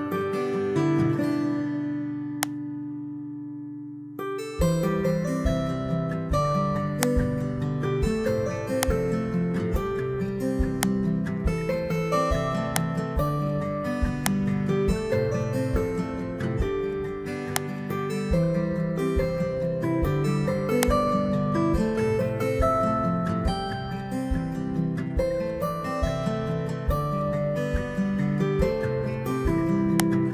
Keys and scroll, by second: 1.1 ctrl+v, 18.9 BackSpace.